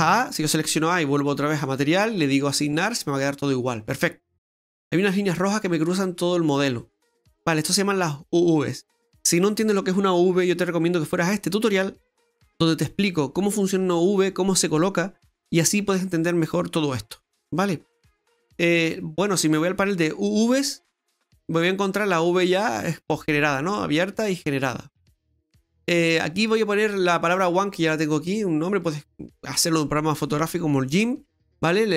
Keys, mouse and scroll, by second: 0.0 a, 1.6 click, 2.1 click, 2.8 click, 3.8-4.3 scroll down 4, 4.3 middle click, 5.1 middle click, 20.8 click, 21.9-22.5 scroll up 3, 22.5 middle click, 25.3 scroll up 1, 31.8-31.9 scroll up 3.